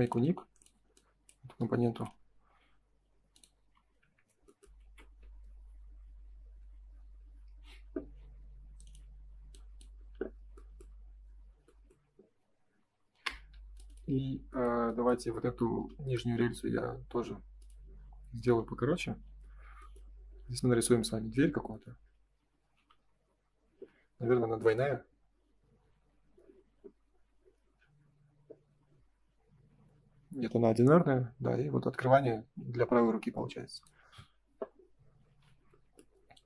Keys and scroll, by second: 3.5 space, 3.7 Escape, 4.7 ctrl+s, 13.2 Escape, 18.1 space, 18.3 Escape, 19.2 ctrl+s, 23.7 space, 35.2 ctrl+s.